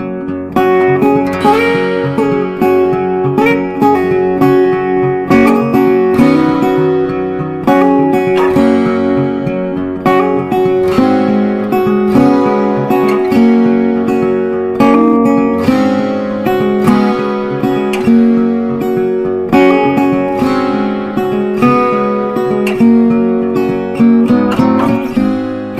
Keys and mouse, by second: 5.2 shift+Page_Down, 7.3-10.4 drag, 10.4-14.3 drag, 14.3 right click, 16.0 click, 18.6 click, 20.1 click.